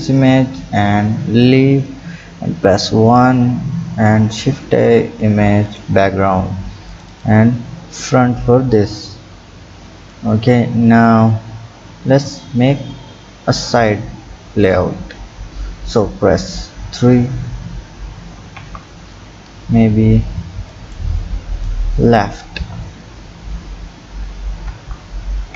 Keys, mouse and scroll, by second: 2.9 KP_1, 3.7 shift+a, 8.4-9.5 scroll up 4, 9.5-9.9 scroll up 2, 16.9 KP_3, 18.6 KP_1, 20.8 click, 24.7 KP_1.